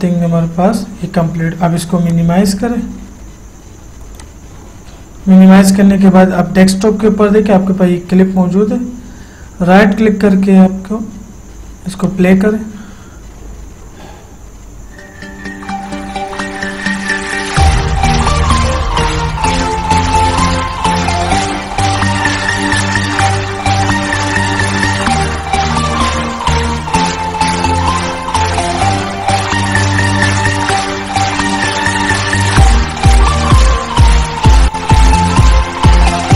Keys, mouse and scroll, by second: 2.3 click, 4.4 click, 6.6 typing, 12.3 click.